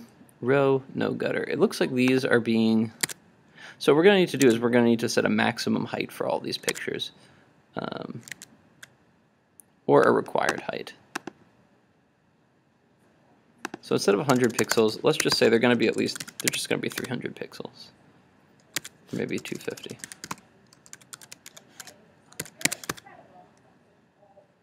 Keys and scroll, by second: 3.1 super+Tab, 16.2 super+s, 17.0 super+r, 18.9 super+Tab, 22.5 super+s, 22.8 super+Tab, 22.9 super+r.